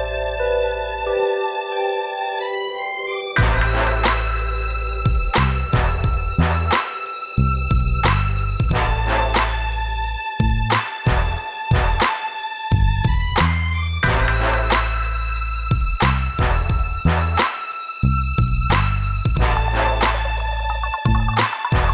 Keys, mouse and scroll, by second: 3.4 click, 3.8 click, 3.9 double click, 4.5 scroll down 2, 5.3 scroll up 2, 6.2 click, 7.0 click, 7.0 click, 8.1 click, 8.1 click, 8.7 click, 9.2 click, 10.2 click, 11.7 click, 14.0 click, 15.2 click, 16.3 click, 17.8 click, 19.2 click, 20.7 click.